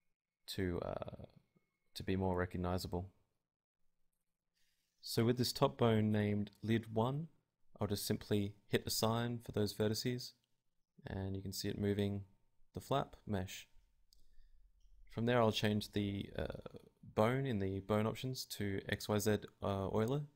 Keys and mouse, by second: 0.0 middle click, 0.3 Tab, 0.4-2.1 right drag, 1.0 Tab, 5.0 right click, 5.8 click, 5.8-6.8 right drag, 6.8-7.9 drag, 7.0 right click, 8.3 middle click, 9.4-10.8 drag, 9.4-10.7 right drag, 10.7 Tab, 11.1 r, 11.3 right click, 11.4 z, 11.6 r, 12.0-13.0 drag, 15.5-17.4 drag, 18.3-20.1 drag, 20.1 middle click.